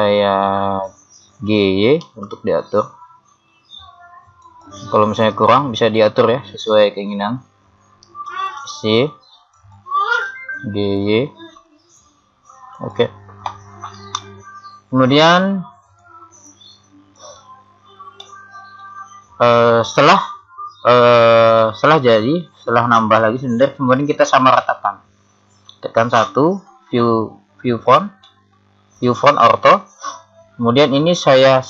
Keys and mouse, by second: 2.0 g, 8.3 s, 10.1 g, 15.9 click, 18.2-21.8 middle drag, 24.9-28.2 middle drag, 26.1 KP_1.